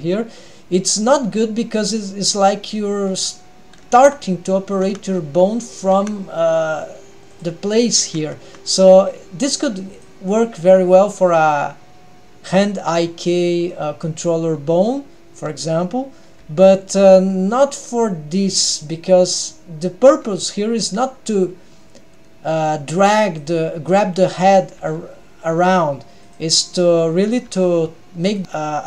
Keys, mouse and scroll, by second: 2.4-2.8 scroll up 2, 2.8 middle click, 4.1 Tab, 5.0 Tab, 6.1 Tab, 7.4 click, 8.3 Tab, 9.1-10.1 scroll down 2, 10.1 click, 10.7-11.7 scroll down 2, 11.0-11.7 middle drag, 13.5 middle click, 14.6-14.9 scroll up 1, 16.5 g, 20.2-20.6 scroll down 1, 20.9 g, 26.7-27.2 middle drag, 26.7 g, 27.5 g, 28.4 middle click.